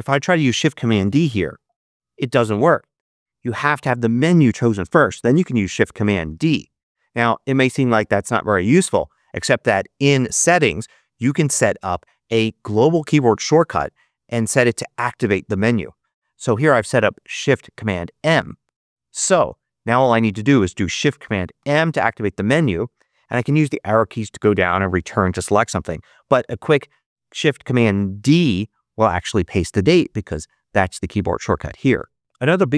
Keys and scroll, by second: 1.5 shift+super+d, 6.3 shift+super+d, 8.7 super+z, 21.5 shift+super+m, 28.2 shift+super+d.